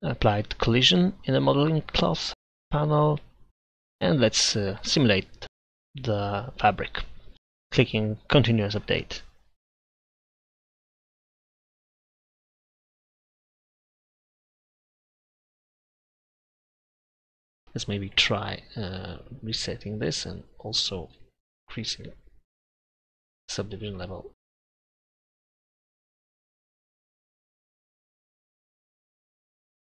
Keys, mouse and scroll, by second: 0.3-1.5 drag, 7.3-9.4 drag, 12.6 z, 14.8-16.5 middle drag, 19.1 click, 20.0 Tab, 20.8 a, 21.2 a, 22.0 w, 24.1 Tab, 25.7 middle click, 26.8 middle click, 27.5 middle click.